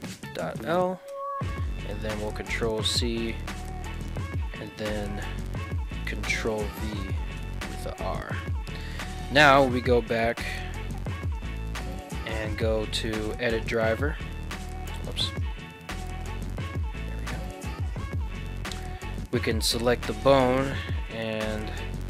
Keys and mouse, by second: 2.1 ctrl+c, 5.3-8.1 ctrl+drag, 8.9 ctrl+Tab, 9.3 right click, 10.5 click, 11.3 click, 12.4-14.1 right drag, 15.3-22.0 right drag.